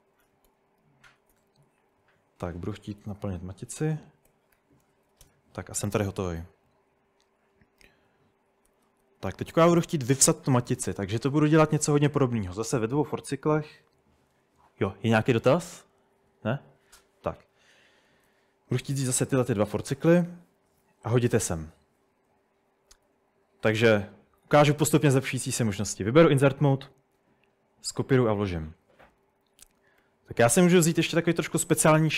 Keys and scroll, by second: 0.0 Tab, 0.2 Tab, 0.5 Tab, 1.1-5.5 typing, 8.7-9.3 typing, 11.2-13.0 typing, 18.3-19.7 typing, 20.7-26.9 typing, 29.2-31.4 typing, 29.8 Escape, 30.0 Escape.